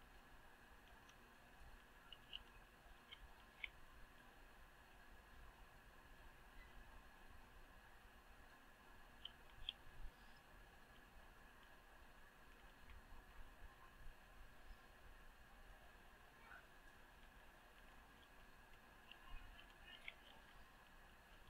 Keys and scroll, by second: 3.0 Return, 10.9 Return, 12.7 ctrl+shift+Return, 20.3 Return.